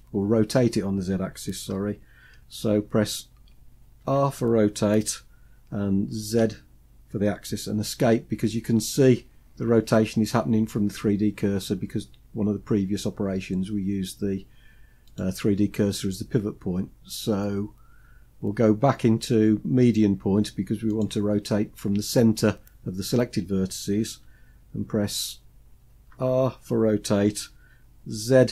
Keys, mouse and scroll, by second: 3.5 r, 14.6-24.7 drag, 25.6 r.